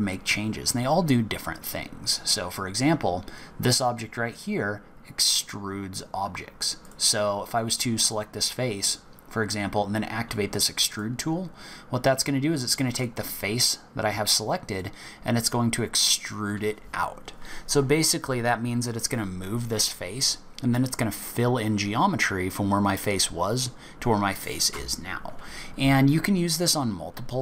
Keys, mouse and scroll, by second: 6.8 click, 8.0 click, 8.6-10.6 scroll up 1, 10.6 scroll up 1, 10.9 click, 13.0 click.